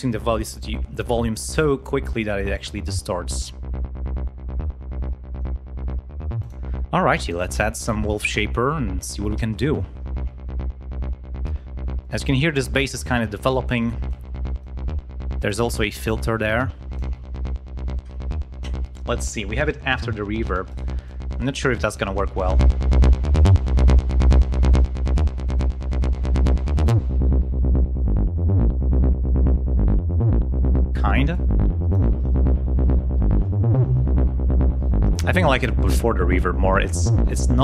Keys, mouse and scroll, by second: 2.9-5.5 drag, 6.3 click, 7.2 right click, 7.3 middle click, 9.8-10.5 scroll down 2, 11.9 click, 14.0 click, 16.0-17.1 drag, 20.6 right click, 21.0 click, 21.9-23.6 drag, 24.5-25.6 drag, 25.9 click, 27.0 click, 27.8-30.4 drag, 31.2 click.